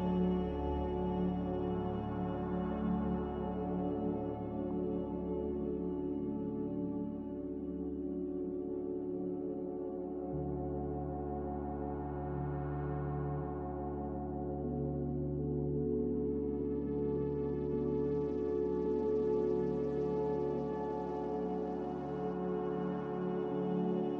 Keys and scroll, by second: 1.6 ctrl+z, 14.2-15.3 typing, 23.8 a.